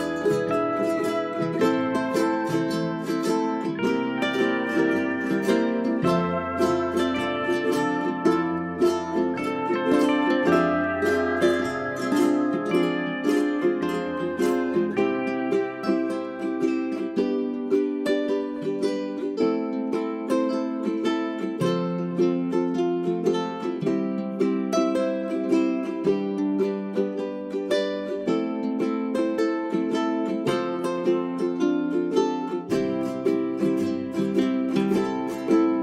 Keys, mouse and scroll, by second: 0.2 click, 1.4 space, 3.1 click, 5.2 right click, 6.1 click, 10.7 j, 11.2 click, 14.8 click, 15.1-17.3 scroll down 2, 15.3 click, 20.0-22.4 scroll up 1, 28.3 click, 29.6 right click, 30.2-31.9 drag, 31.9 right click, 32.5-34.4 drag.